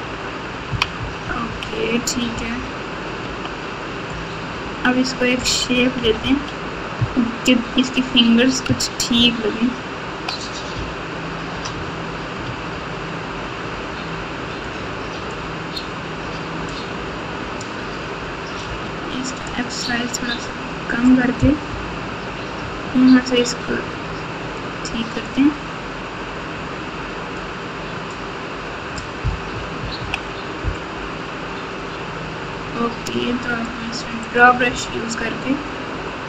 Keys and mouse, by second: 0.0-3.2 typing, 6.0 KP_8, 6.2 KP_8, 6.9-7.6 KP_Add, 9.1-10.2 ctrl+KP_6, 10.7-11.4 ctrl+KP_8, 12.5 Tab, 14.7 click, 16.7 click, 18.6 f, 21.6 KP_1, 24.6 click, 27.4 click, 29.5 KP_2, 29.7 KP_2, 29.9 KP_2, 34.2 click.